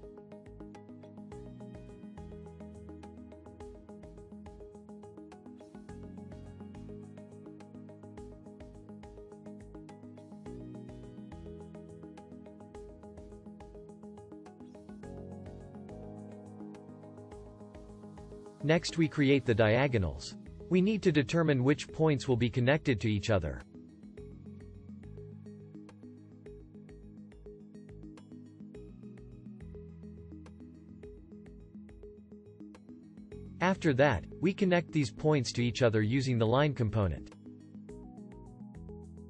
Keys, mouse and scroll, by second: 39.0-39.2 alt+drag.